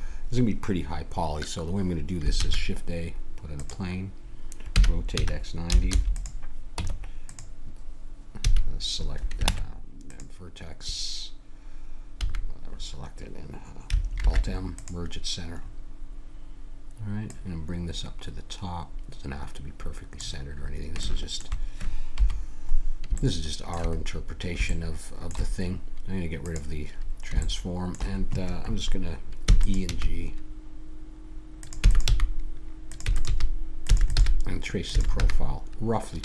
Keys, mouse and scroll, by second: 2.3 shift+a, 4.7 r, 6.8 Tab, 8.4 a, 9.5 ctrl+Tab, 12.1 a, 14.2 alt+m, 20.5-22.1 middle drag, 22.1 KP_1, 26.5 click, 26.9-29.4 middle drag, 29.5 e, 29.9 g, 31.8-34.9 typing.